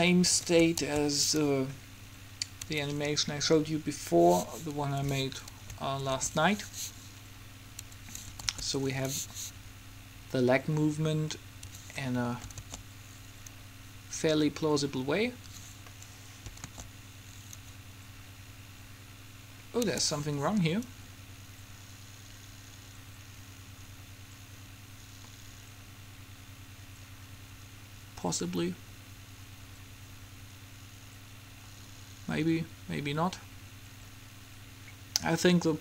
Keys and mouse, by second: 1.0 alt+a, 6.2 alt+a, 8.0 Escape, 8.6 alt+a, 11.7 Escape, 12.7 alt+a, 15.7 Escape, 16.7 alt+a, 20.0 Escape, 21.0-22.7 drag.